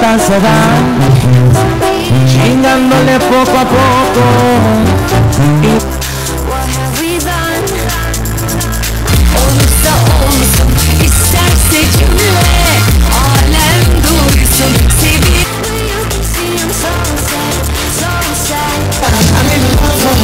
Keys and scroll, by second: 5.7 Page_Down, 15.4 Page_Down.